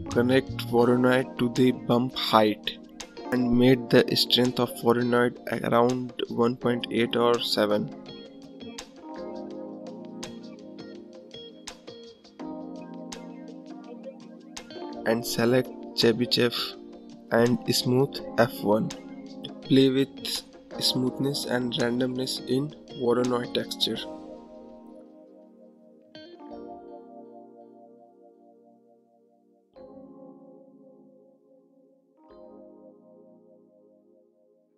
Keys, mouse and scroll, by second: 2.5 scroll down 1, 2.7-3.8 scroll up 8, 13.2 click, 16.6-23.2 drag, 25.9-29.1 drag, 32.6-34.7 drag.